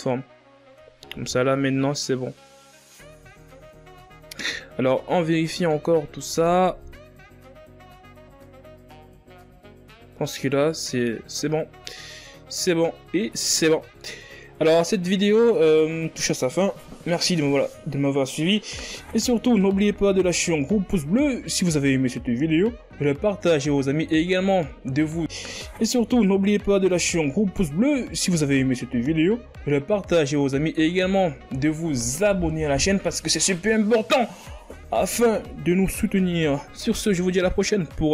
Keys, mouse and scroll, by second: 2.3 ctrl+a, 5.6 a, 6.0-6.7 scroll down 3, 6.7 scroll down 1, 6.9-8.5 scroll up 5, 8.5-8.9 scroll up 1, 8.9 z, 9.8-10.4 ctrl+scroll up 2, 10.4-10.8 scroll up 2, 10.8 z, 11.4 Tab, 11.6 right click, 11.6 Tab, 11.8 alt+right click, 11.9 s, 12.1 Tab, 12.3 scroll up 4, 12.3 Tab, 12.4 middle click, 12.7 s, 12.8 middle click, 12.9 click, 13.0 middle click, 13.2 ctrl+z, 13.2 ctrl+z, 13.3 click, 13.5 alt+right click, 13.6 s, 13.7 KP_1, 13.8 Tab, 13.9 scroll down 5, 14.0 scroll up 5, 14.2 ctrl+z, 14.3-15.4 scroll down 7, 15.4 ctrl+scroll down 3, 15.9-16.8 scroll up 5, 16.8-17.3 scroll down 3, 17.3-20.3 ctrl+scroll up 4.